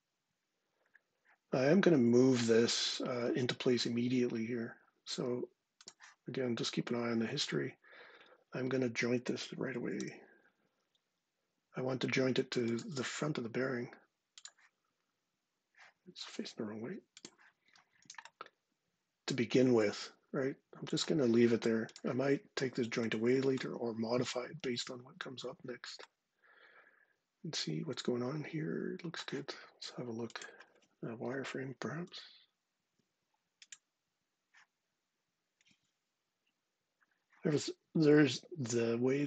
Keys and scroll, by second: 9.8 j, 31.8 ctrl+7.